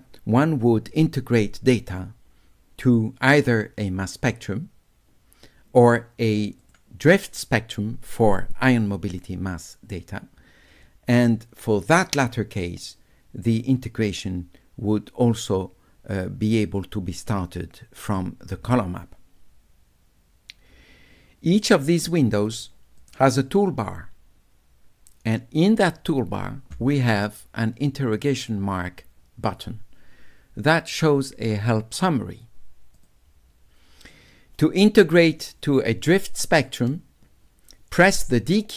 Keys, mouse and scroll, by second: 3.5 click, 6.6 click, 11.9 click, 22.4 click, 23.0 click, 33.0 click.